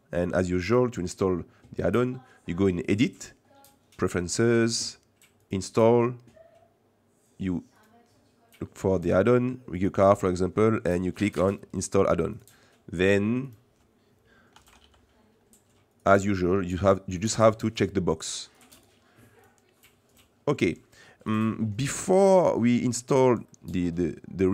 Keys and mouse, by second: 3.0-4.4 drag, 18.7 click, 19.4 click, 20.9 middle click, 22.1-24.5 middle drag.